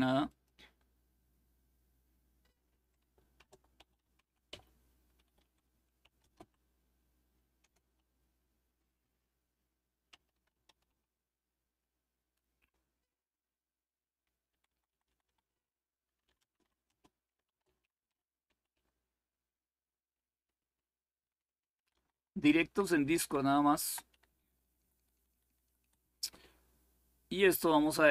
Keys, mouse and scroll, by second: 0.0 click, 2.9-5.9 typing, 9.6-11.1 typing, 14.2 Left, 14.4 Left, 14.6 Left, 14.8 Left, 15.7-18.9 typing, 19.9-20.9 Delete, 21.5 Left, 21.7 Left, 21.9 Left, 22.0-23.2 Left, 23.5 Left, 23.7-24.8 typing, 25.3 Delete.